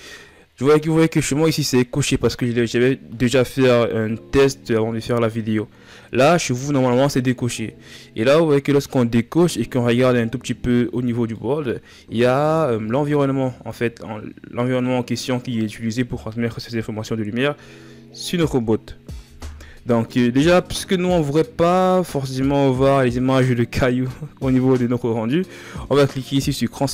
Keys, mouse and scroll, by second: 6.1 click, 7.6 scroll down 2, 9.1-16.2 middle drag, 20.6-23.7 middle drag, 26.7-26.9 drag.